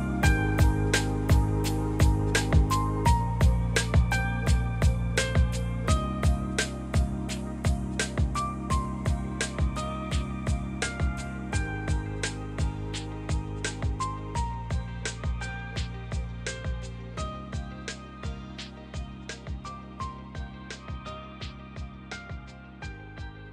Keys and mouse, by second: 1.3 click, 1.5 Tab, 2.4 Tab, 3.2 click, 4.1 g, 4.3 y, 5.6 shift+click, 5.9 Tab, 9.1 Tab, 16.5 click, 18.2 shift+click, 18.6 s, 19.4 click, 20.6-21.8 drag, 22.4 s.